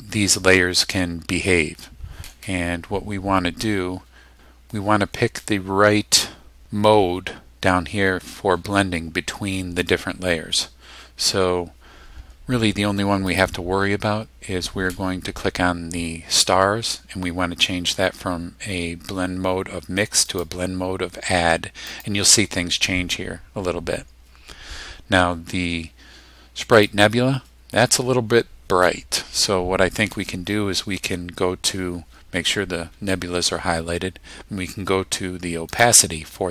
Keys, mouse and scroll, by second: 13.3 click, 20.3 click, 21.9 click, 26.8 click, 35.7 click.